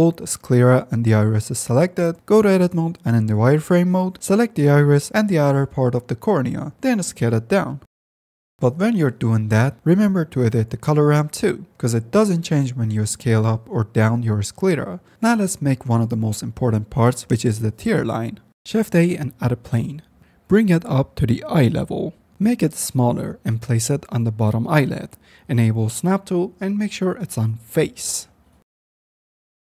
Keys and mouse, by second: 0.4 click, 1.2 ctrl+shift+z, 1.3 shift+click, 2.0 Tab, 2.4 shift+click, 3.5 z, 4.4 click, 6.4 ctrl+z, 7.0 s, 8.4 ctrl+z, 8.4 Tab, 10.8-11.5 drag, 11.9 click, 12.8 click, 13.8 click, 15.8 click, 17.6 shift+a, 20.2 g, 21.5-23.2 typing, 23.5 click, 24.2 Tab, 24.8 click, 26.1 click, 26.4-28.8 drag, 29.0 click, 29.4 click.